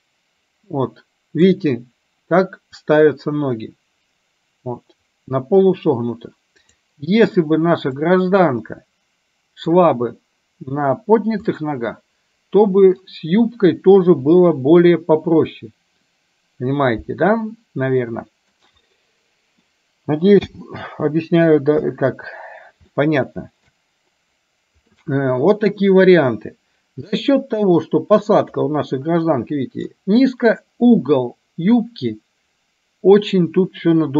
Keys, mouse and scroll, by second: 6.6 click, 8.1 click, 8.5-9.8 drag, 11.5-12.8 scroll up 1, 12.8 middle drag, 14.1 KP_3, 17.6-18.5 middle drag, 19.0-19.8 middle drag, 20.5 n, 21.8 KP_1, 23.0-23.8 shift+middle drag, 25.0-26.1 middle drag, 28.3-30.1 drag.